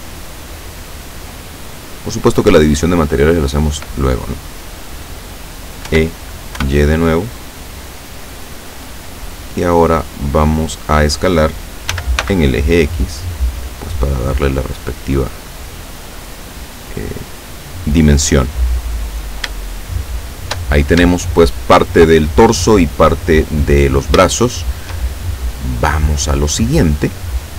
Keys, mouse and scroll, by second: 1.6 click, 5.9 e, 6.6 y, 10.8 click, 12.0 s, 12.3 x, 14.3 click, 15.2-18.4 drag, 19.2 scroll down 1, 19.7-20.8 shift+middle drag, 21.2 shift+middle click, 24.4 shift+middle click, 25.2-25.8 shift+scroll up 3.